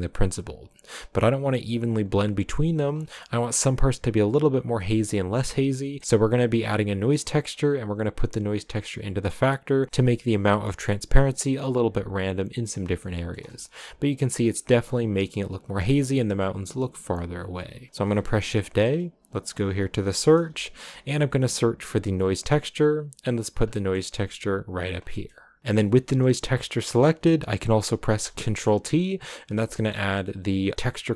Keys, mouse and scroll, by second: 2.9-3.3 scroll down 4, 3.3-7.5 middle drag, 7.5 click, 9.9-12.2 drag, 12.6-12.9 scroll down 2, 12.9 shift+middle click, 13.3-16.1 scroll up 5, 28.0 ctrl+t.